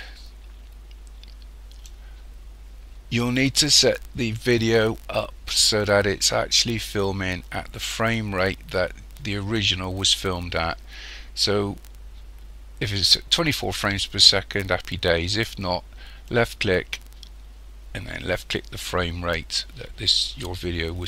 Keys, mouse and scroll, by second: 16.3 click.